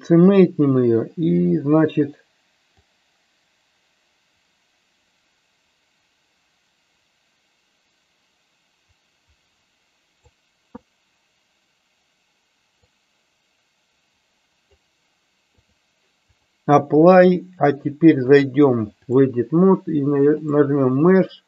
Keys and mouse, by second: 2.7-10.4 drag, 13.0-14.9 drag, 15.6-16.6 drag, 18.3-19.3 drag, 20.3-21.4 drag.